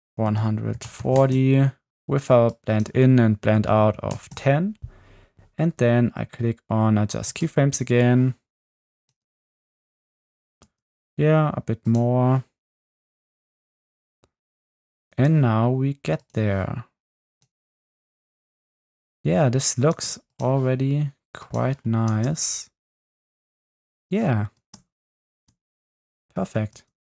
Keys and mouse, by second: 2.6-4.2 drag, 7.3 click, 9.0 click, 9.2 space, 10.6 space, 13.6 space, 15.1 space, 17.7 space, 20.0 space, 20.3 click, 22.1 space, 24.6 space, 25.3 space, 26.8 space.